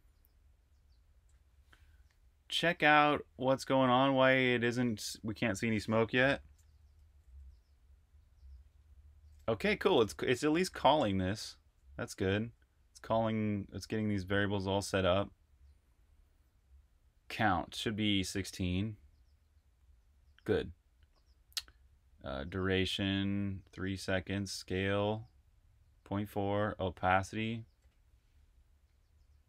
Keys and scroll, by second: 6.8-7.5 typing, 11.0 super+Tab.